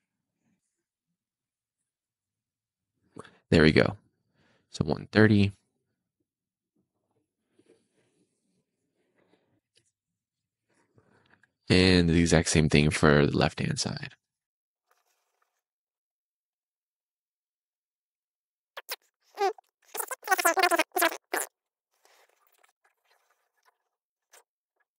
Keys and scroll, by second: 0.0 super+z, 2.1 0, 2.3 Return, 3.8 Escape, 9.6 Escape, 11.3 d, 14.3 0, 14.5 Return, 15.5 d, 16.8 Escape, 17.1 BackSpace, 17.2 super+z, 18.1 0, 18.2 Return, 18.8 Escape, 20.4 BackSpace, 21.0 BackSpace, 22.9 BackSpace, 23.6 BackSpace, 24.1 BackSpace.